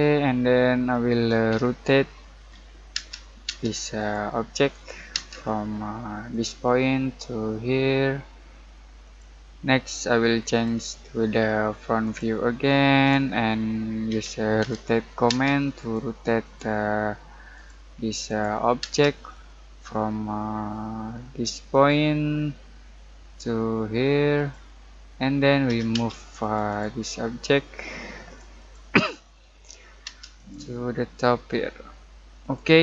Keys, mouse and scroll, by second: 0.4-1.5 scroll up 1, 1.5-2.4 typing, 3.4 space, 3.9 click, 5.1 space, 5.4-6.3 scroll up 1, 6.3 click, 9.0 click, 13.2-14.1 scroll up 1, 14.1-15.3 typing, 15.8 click, 18.8 space, 19.2-21.0 scroll up 1, 21.7 click, 22.3-22.9 scroll down 1, 24.3 click, 24.8 scroll down 1, 25.0 middle click, 25.6 m, 25.9 space, 26.4 click, 27.0-27.8 scroll down 1, 27.8 middle click, 28.2 click, 29.1-30.0 scroll up 1, 30.0 space, 30.3 click.